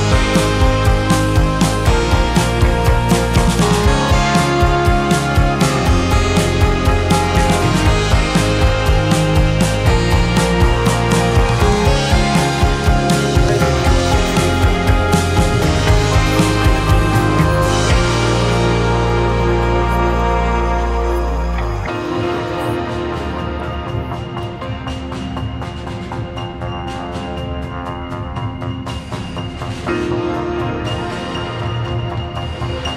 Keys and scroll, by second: 2.2 space, 9.1 Return, 12.1 shift+2.